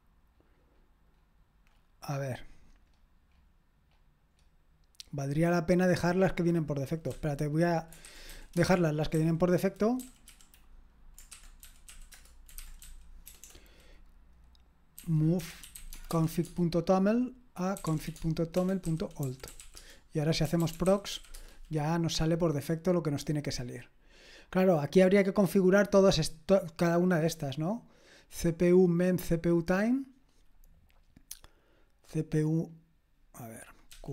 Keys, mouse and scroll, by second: 1.9-7.1 scroll up 1, 7.1-13.5 typing, 15.4-21.6 typing, 33.9-34.1 drag, 33.9 q.